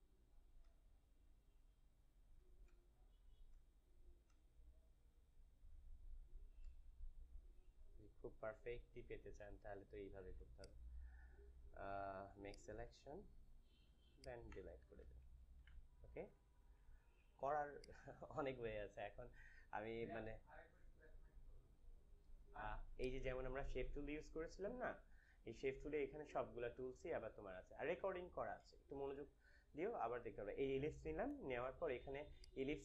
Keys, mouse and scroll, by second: 3.1 shift+space, 10.5 right click, 12.4 click, 13.8 Return, 14.0 click, 14.4 click, 14.4 Delete, 15.5 ctrl+d, 16.4 ctrl+-, 17.3 space, 22.9-32.8 drag.